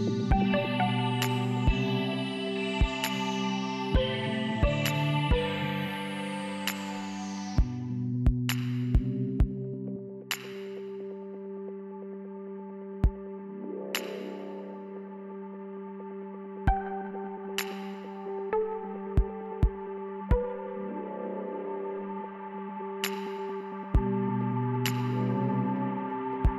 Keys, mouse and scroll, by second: 0.2 F3, 1.0 space, 10.7 F4.